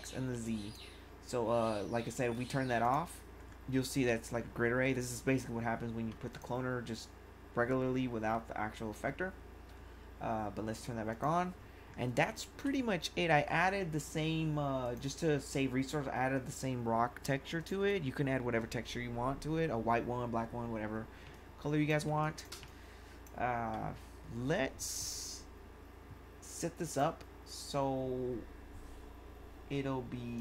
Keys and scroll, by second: 0.3 1, 12.2 1, 21.2 1.